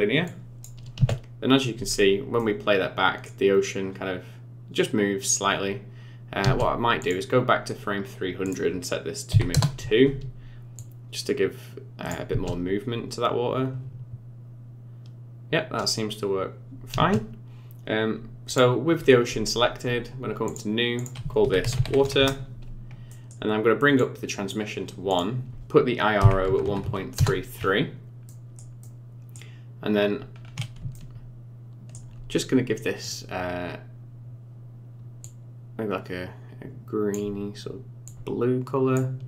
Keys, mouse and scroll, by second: 0.2 click, 0.9 space, 1.8-2.1 scroll up 4, 2.3 middle click, 6.4 space, 7.0 click, 8.4 click, 10.7 click, 12.3 space, 16.9 space, 18.4 click, 20.4 click, 20.9 click, 23.0 middle click, 24.0 click, 25.0 click, 26.8 KP_3, 27.6-28.2 scroll up 8, 28.2 middle click, 28.8 middle click, 30.3 scroll up 3, 30.9 shift+middle click, 33.0 click.